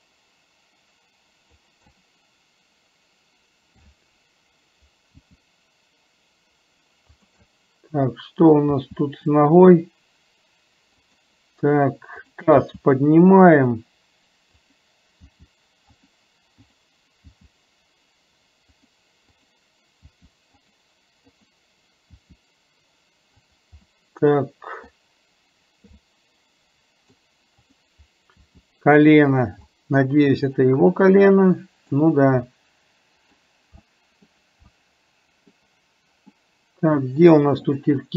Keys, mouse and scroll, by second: 2.0-3.9 middle drag, 7.5 scroll up 1, 7.6-8.6 middle drag, 8.6 scroll down 1, 12.3 click, 16.8 click, 19.3 click, 21.3 click, 23.9 middle click, 24.9 scroll down 1, 26.1 scroll up 1, 26.3 middle click, 27.1 scroll down 1, 29.8 scroll up 1, 29.9-31.9 middle drag, 32.7 middle click, 33.8 scroll up 1, 34.1 middle click, 34.8 scroll up 1, 34.9 middle click, 36.3 scroll up 1, 36.4-37.8 middle drag.